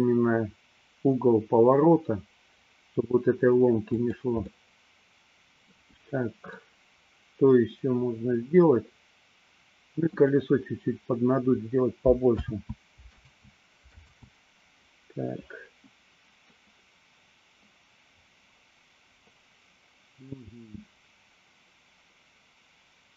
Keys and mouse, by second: 4.6-6.0 middle drag, 6.7-10.4 middle drag, 12.5 ctrl+z, 13.2 ctrl+z, 14.3 ctrl+z, 16.6-23.1 middle drag.